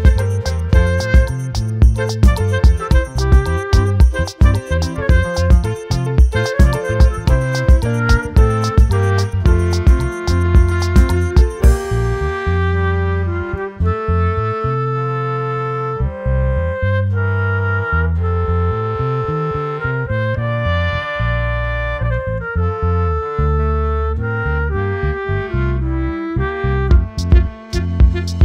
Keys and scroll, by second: 24.6 ctrl+t.